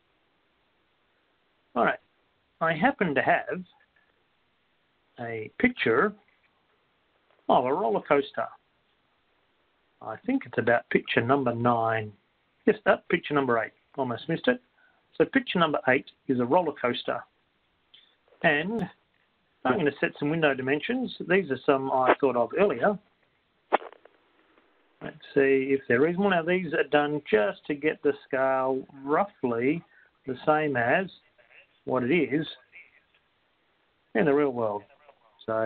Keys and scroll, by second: 10.3 Down, 22.5 8, 23.2 0, 24.5 Down, 25.2 8, 26.2 0, 27.6 Down, 28.5 1, 29.0 0, 30.5 Down, 34.4-35.6 typing.